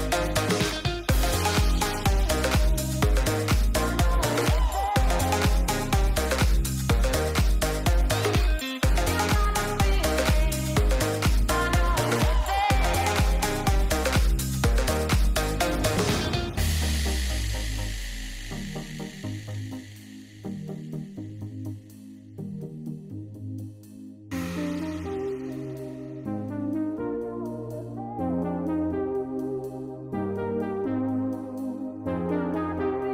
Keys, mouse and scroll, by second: 1.0 middle drag, 1.8 middle click, 2.2 shift+middle click, 2.7 shift+middle click, 3.4 g, 4.3 r, 6.2 g, 7.2 r, 8.7 KP_0, 9.9 g, 11.4-12.5 drag, 12.2 KP_0, 14.7 r, 20.4 r, 24.2-26.2 drag, 28.4 click, 29.9 shift+middle click, 30.3 shift+middle drag, 31.0 shift+middle click, 31.7 g.